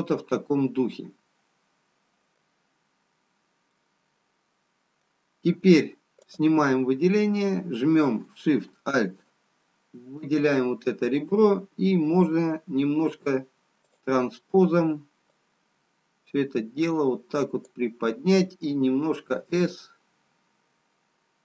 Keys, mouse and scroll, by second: 3.8 middle click, 6.8 click, 10.2 alt+shift+click, 15.3 click, 19.4 s.